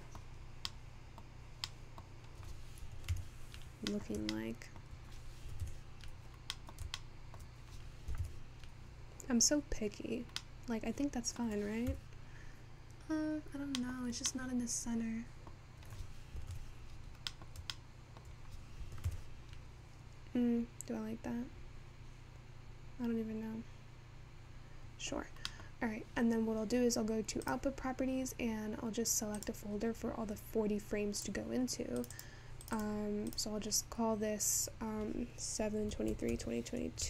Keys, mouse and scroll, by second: 13.3 KP_0, 21.2 alt+KP_0.